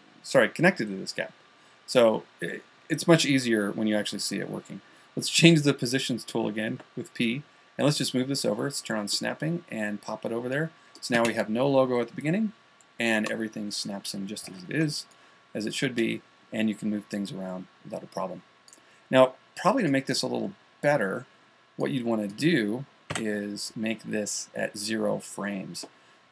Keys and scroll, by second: 15.2 a.